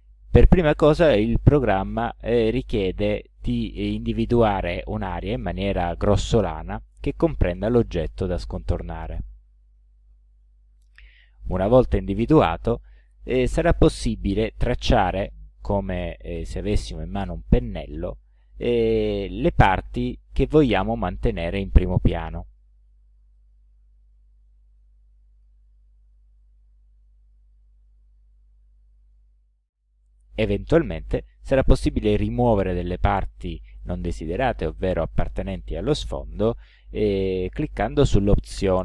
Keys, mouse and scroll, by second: 3.6-9.5 drag, 10.9-11.9 drag, 15.3-18.7 drag, 22.6-23.6 drag, 25.5 click, 27.9-29.3 drag.